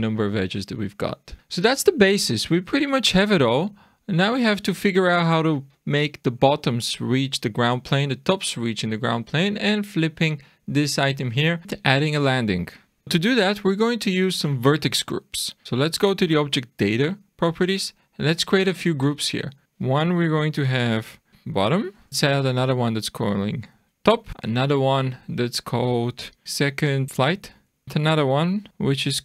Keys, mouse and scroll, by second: 1.4 click, 13.5 middle click, 14.2 scroll down 1, 16.2 click, 19.2 click, 19.6 click, 21.4 t, 22.1 click, 22.6 click, 22.7 click, 24.3 click, 24.4 click, 24.6 click, 27.8 click.